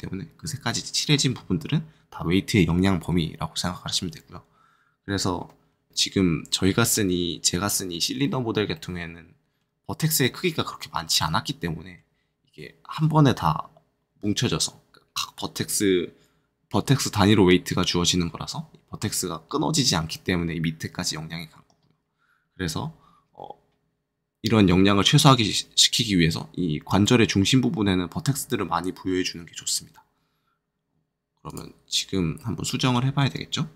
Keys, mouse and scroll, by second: 5.9 right click, 5.9-8.6 middle drag, 8.7-15.8 middle drag, 31.4 click, 32.3 middle click.